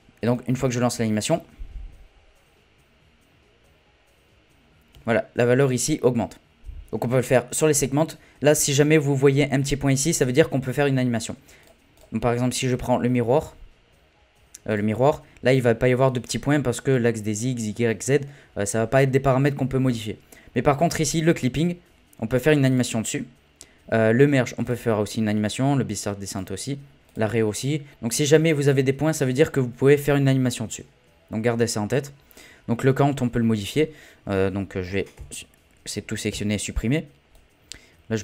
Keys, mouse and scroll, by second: 0.3 click, 0.9 space, 4.9 space, 11.6 click, 14.7 click, 22.7-26.4 drag, 35.1 a, 36.3 Delete, 37.3-38.2 drag.